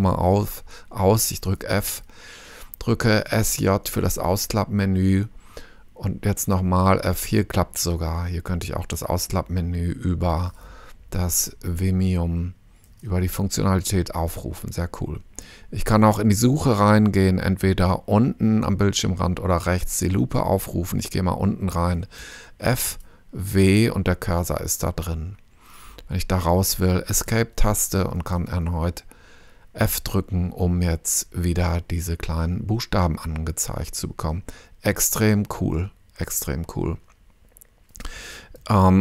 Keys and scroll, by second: 1.8 f, 3.0-4.0 typing, 6.4 f, 11.2 Escape, 22.2 f, 23.4 w, 27.3 Escape, 29.3 f.